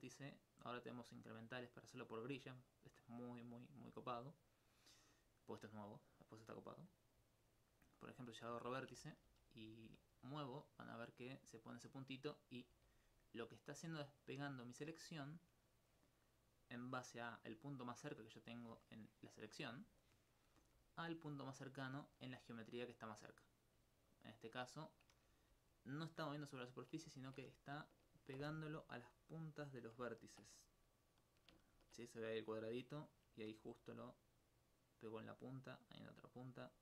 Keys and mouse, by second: 8.8 alt+click, 9.3 alt+f, 11.9 right click, 12.8 g, 15.7 right click, 20.6 g, 24.7 right click, 25.4 g, 27.0 right click, 29.8 click, 33.7 g.